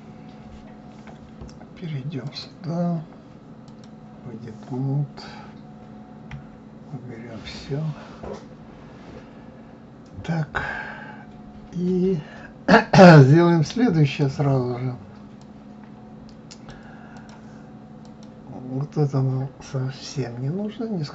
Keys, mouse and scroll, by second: 0.0-0.8 scroll down 1, 0.8-2.0 scroll down 1, 2.0 scroll down 1, 2.3-5.2 drag, 6.3 KP_Divide, 7.5-10.5 middle drag, 15.4-17.3 drag, 18.0 click.